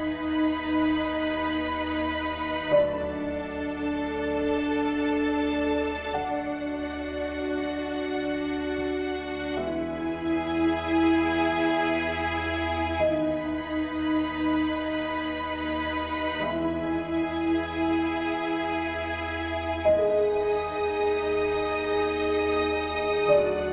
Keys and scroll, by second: 11.8 ctrl+t, 16.9 ctrl+z.